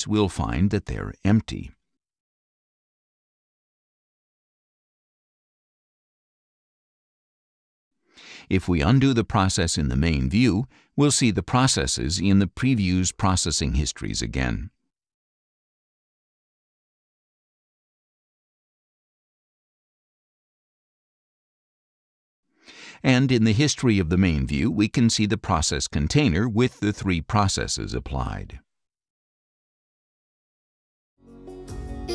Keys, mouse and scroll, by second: 2.7 click, 3.1 right click, 5.4 click, 8.1 click, 9.8 click, 11.4 click, 12.2 right click, 13.4 click, 14.4 click, 15.8 click, 16.5 right click, 17.7 click, 20.1 click, 22.0 click, 24.0 right click, 25.6 click, 28.0 click, 28.7 click.